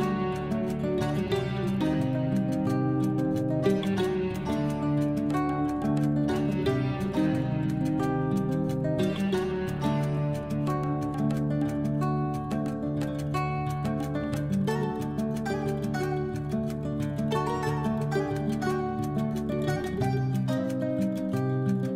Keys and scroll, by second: 3.5 F12, 4.5 2, 4.8 Return.